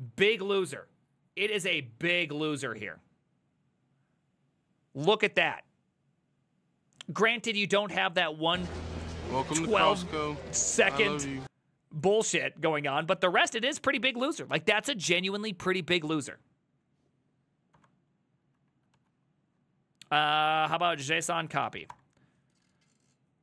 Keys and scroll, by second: 17.8 Up, 18.6 Left, 19.0 ctrl+w, 20.7-22.3 typing.